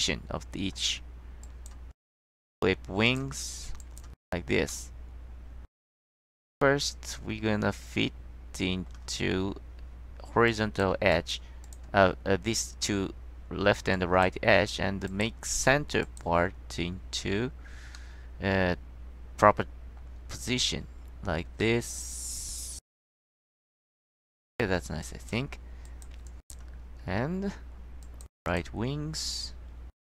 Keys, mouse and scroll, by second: 1.6 click, 2.5 click, 3.2 click, 3.6 middle click, 3.9 click, 4.8 middle click, 6.2-9.0 middle drag, 10.6 click, 11.2 click, 11.8 click, 12.6-13.3 drag, 14.1 click, 15.2 click, 16.2 click, 18.1-20.1 drag, 21.7-24.3 drag, 24.3 middle click, 25.2 click, 26.0 click, 26.4 click, 27.0 middle click, 28.2 click, 28.6 click.